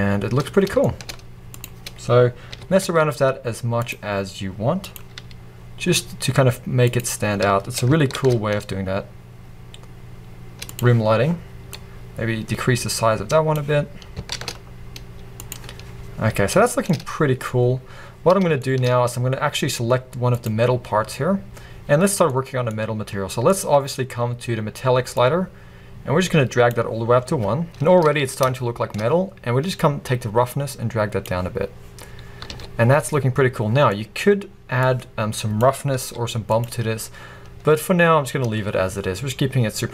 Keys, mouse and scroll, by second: 2.6 g, 5.2 g, 8.3 shift+d, 12.7-16.4 drag, 14.4 shift+d, 16.8-20.6 middle drag, 24.8 click, 25.5-28.6 drag, 28.6-30.2 middle drag, 30.2-36.9 drag, 37.9 scroll up 1.